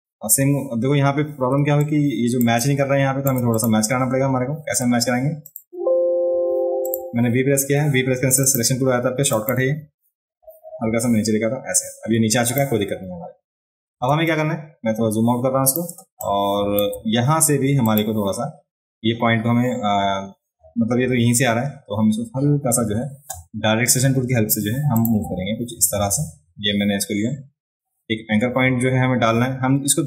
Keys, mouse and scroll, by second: 0.2-1.0 scroll up 2, 1.6 ctrl+space, 1.8 ctrl+click, 2.6 click, 3.5 click, 4.7 v, 5.4 click, 5.7 v, 6.3 v, 6.9 click, 8.4 click, 9.3 click, 12.5 click, 14.1 ctrl+space, 14.2 ctrl+space, 14.3-15.7 ctrl+drag, 16.2 click, 17.9 click, 24.9 click.